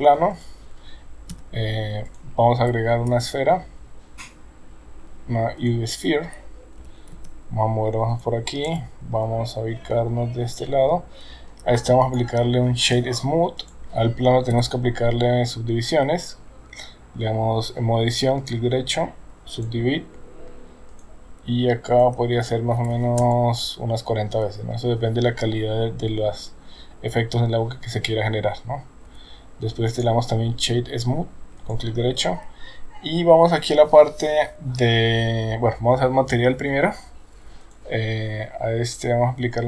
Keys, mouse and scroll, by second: 1.3 s, 3.1 shift+a, 6.8 g, 8.7 KP_0, 9.9-11.2 middle drag, 12.1 right click, 13.7 click, 14.5 Tab, 18.6-19.7 right drag, 21.0 click, 21.9-23.9 drag, 29.1 Tab, 30.1 right click, 33.6 click, 37.7 click.